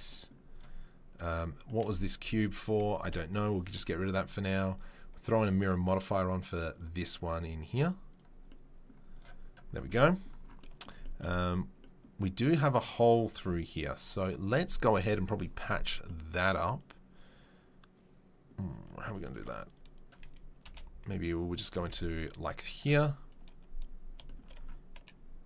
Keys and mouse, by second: 0.6-4.5 middle drag, 3.1 Delete, 4.5 click, 4.6-5.2 middle drag, 6.8 right click, 7.4-9.1 middle drag, 9.1-13.3 right drag, 13.3-25.4 middle drag, 19.3 3, 20.6 KP_3, 21.1 KP_1, 21.7 z.